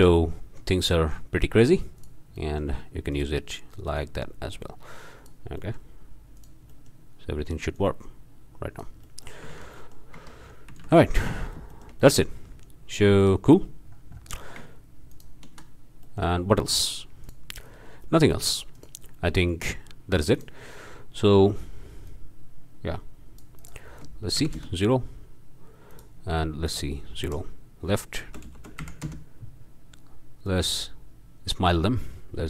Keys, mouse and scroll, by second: 0.9-1.3 drag, 2.0 drag, 2.4-2.8 drag, 3.1 click, 3.9-5.5 drag, 5.6-6.0 drag, 6.4 drag, 6.7-7.1 drag, 7.8-9.0 drag, 9.1-9.4 drag, 9.5 alt+a, 9.8 alt+click, 10.2 alt+Tab, 10.4 alt+scroll down 1, 10.8 alt+a, 11.3 alt+middle click, 11.7-12.4 shift+drag, 13.2-13.6 drag, 13.8-14.4 scroll down 2, 14.4 ctrl+drag, 15.1 ctrl+shift+click, 16.0 ctrl+click, 16.6 click, 17.2 click, 18.8 click, 20.3 ctrl+click, 22.1-23.6 drag, 24.4 0, 24.6 Return, 25.9 click, 26.6 click, 27.2 Right, 28.3 BackSpace, 28.8 KP_0, 29.0 KP_Enter, 30.4-32.4 drag.